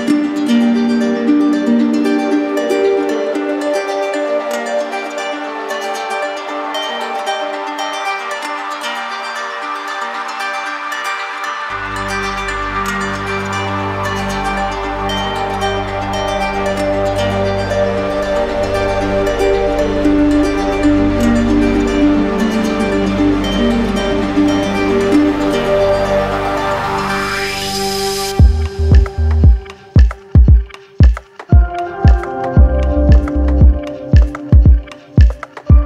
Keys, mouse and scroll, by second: 0.0 right click, 0.9 click, 1.6 right click, 2.4 click, 2.9 right click, 4.3 click, 5.1 click, 5.7 right click, 6.9 click, 7.4 click, 8.5 click, 9.8 click, 10.9 click, 11.4 right click, 12.4 right click, 13.1-15.3 right drag, 16.0-17.9 drag, 20.1 click, 20.6 click, 21.6 click, 22.2 click, 22.6 click, 23.2 click, 24.2 click, 24.4 right click, 25.5 right click, 26.2 alt+right click, 27.0 shift+right click, 28.0 alt+right click, 28.9 alt+right click, 29.6 right click, 31.9 click, 32.7 right click, 33.5 click, 34.0 click, 34.4 click, 34.9 click, 35.5 right click.